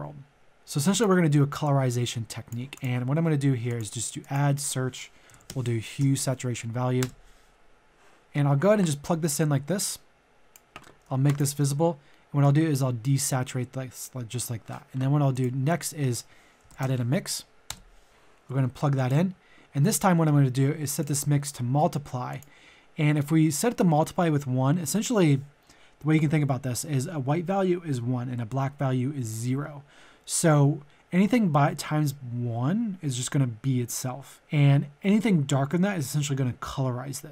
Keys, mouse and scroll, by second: 0.9 click, 5.2 click, 5.3 typing, 6.0 Down, 7.0 Return, 8.2-9.3 scroll up 2, 8.3 middle click, 9.3 click, 11.2-14.2 ctrl+shift+drag, 15.7 click, 16.6 typing, 17.6 Return, 18.1-37.3 drag.